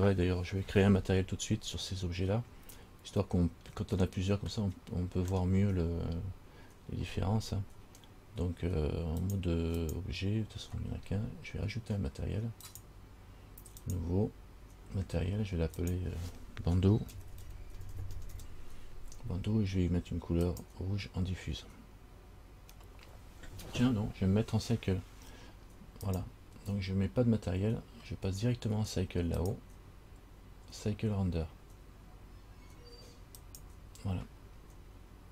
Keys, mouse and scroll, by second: 3.1-3.9 scroll up 3, 4.7 middle click, 9.4 click, 10.1 click, 12.8 click, 14.0 click, 16.0 click, 26.2 click, 29.6 click.